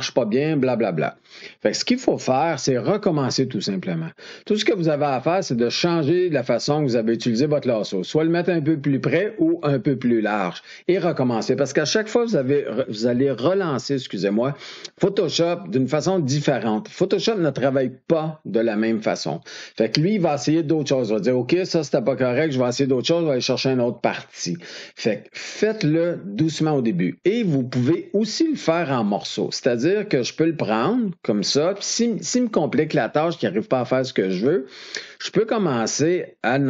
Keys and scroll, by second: 2.1 ctrl+d.